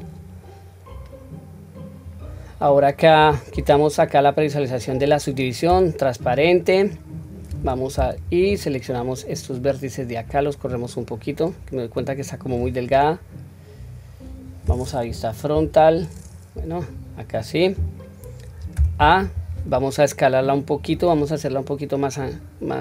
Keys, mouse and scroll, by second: 2.0 click, 7.5 1, 8.4-9.6 drag, 10.6-12.4 drag, 15.0 KP_2, 15.5 KP_1, 16.6 click, 18.7 a, 20.7 click, 22.1-22.8 drag.